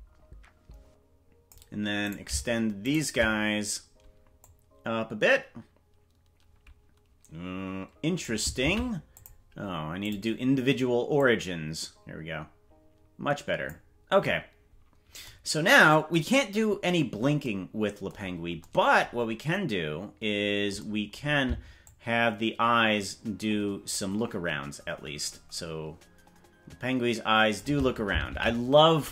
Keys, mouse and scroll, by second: 2.1 right click, 3.0 right click, 4.4-8.2 drag, 8.8 ctrl+z, 9.1-10.1 drag, 11.1-13.6 drag, 21.8-27.6 shift+drag, 28.4 ctrl+z.